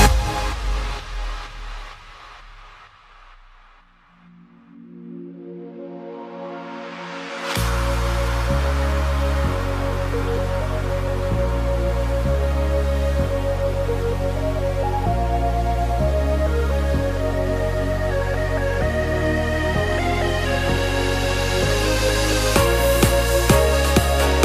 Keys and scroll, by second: 2.3 super+z, 18.0 super+z, 18.6 super+z, 19.7 alt+super+z, 20.0 alt+super+z, 20.4 alt+super+z.